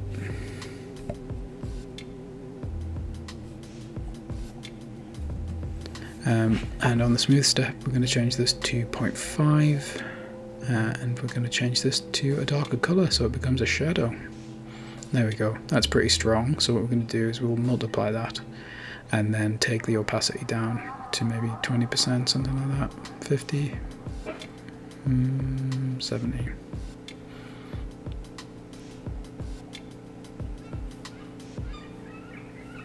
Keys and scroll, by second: 0.2 typing, 0.6 Return, 19.1 Right, 20.0 BackSpace, 20.2 BackSpace, 20.7 5, 20.9 Return, 24.0 Left, 24.2 Right, 24.7 BackSpace, 25.6 7, 25.8 Return, 29.7 Right, 30.1-31.2 typing.